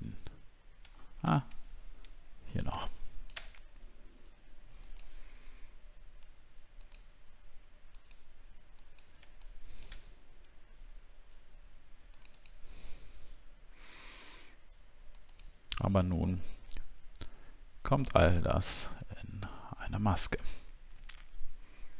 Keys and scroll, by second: 1.0 alt+scroll up 1, 19.6 alt+scroll down 1.